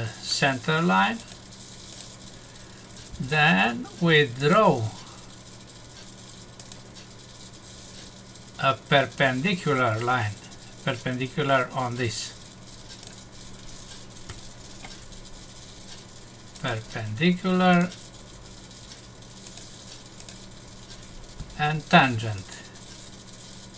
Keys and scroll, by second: 14.3 Escape.